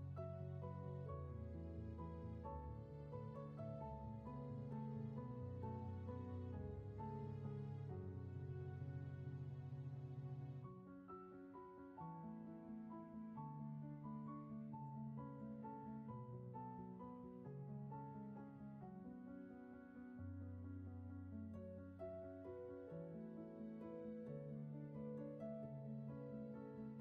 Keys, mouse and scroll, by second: 1.9 ctrl+z, 2.4 scroll up 1, 3.1 space, 7.0 ctrl+z, 8.9 scroll down 1, 9.5 space, 10.1 ctrl+z, 22.8 ctrl+z, 24.6 ctrl+z, 26.1 ctrl+z.